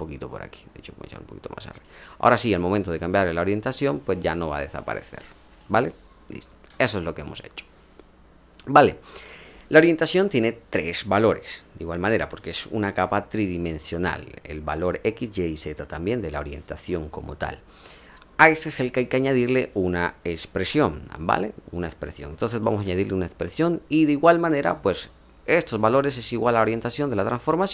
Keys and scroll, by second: 6.6 ctrl+z.